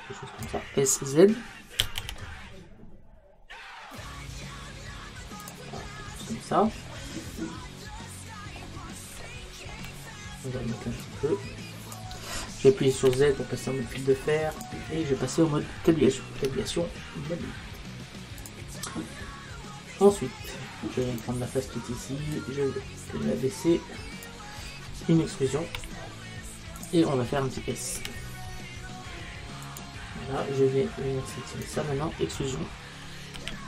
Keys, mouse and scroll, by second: 1.9 s, 5.5-7.0 drag, 7.0 middle click, 7.4 middle click, 7.8-11.1 middle drag, 11.1 click, 13.1 z, 16.4 Tab, 19.1-21.1 middle drag, 21.1-24.3 right drag, 22.4 click, 25.8 e, 26.9 click, 28.7 s, 29.8 click, 31.7-33.4 right drag, 33.4 e.